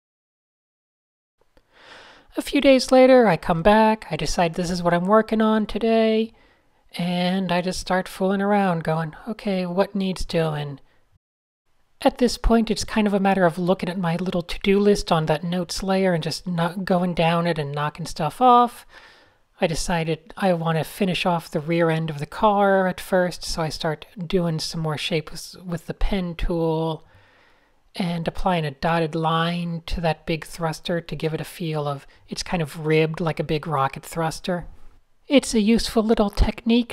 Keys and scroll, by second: 10.9 p, 12.4 super+z, 16.0 x, 17.6 super+h, 17.9 super+h, 19.8 0, 19.9 Delete, 20.3 Tab, 20.4 8, 21.7 shift+super+a, 22.3 p, 23.2 super+z, 25.0 shift+super+a, 26.1 shift+super+a, 26.8 shift+super+a, 27.5 super+z, 28.0 shift+super+a, 28.4-28.8 typing, 30.4 shift+super+a, 30.7 p, 32.1 shift+super+a, 33.3 super+space, 33.4 super+space, 33.5 super+space.